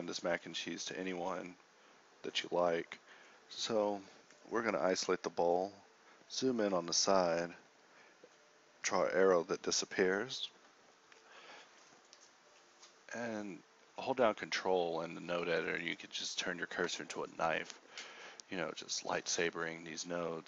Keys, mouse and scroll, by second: 0.6 a, 1.4 KP_Divide, 7.3 d, 11.4 g, 18.6 x.